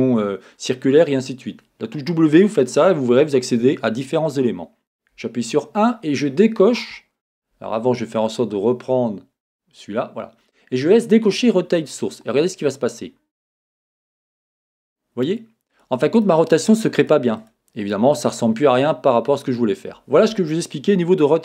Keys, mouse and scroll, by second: 5.2 KP_1, 8.4-13.9 drag, 12.1-12.7 scroll up 1, 12.7-13.6 scroll down 1, 15.3 click, 16.2 click, 16.6 click, 17.0 click, 17.4 click, 17.9 click.